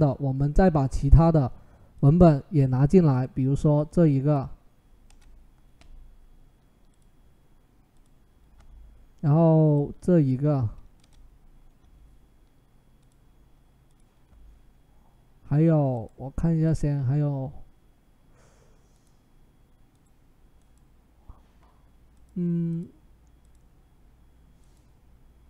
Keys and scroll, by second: 4.9 Return, 7.8 Return, 10.8 Return.